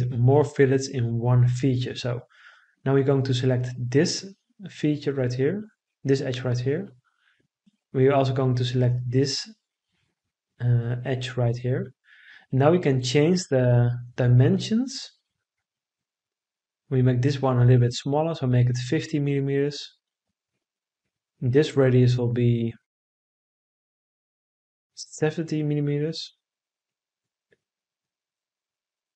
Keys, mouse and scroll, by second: 15.0 5, 15.5 0, 16.1 Return, 24.2 7, 24.5 0, 25.1 Return.